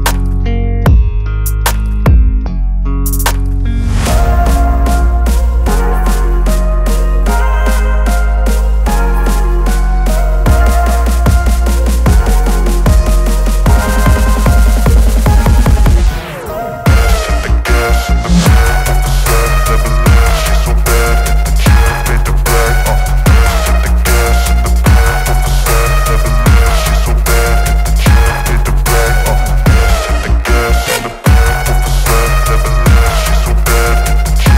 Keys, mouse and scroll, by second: 0.9-1.6 drag, 2.1-3.6 typing, 5.3-6.0 click, 6.1-7.9 typing, 9.3-10.0 drag, 11.4 click, 12.2 ctrl+0, 17.6-21.6 drag, 23.8-25.2 alt+drag, 30.9 click.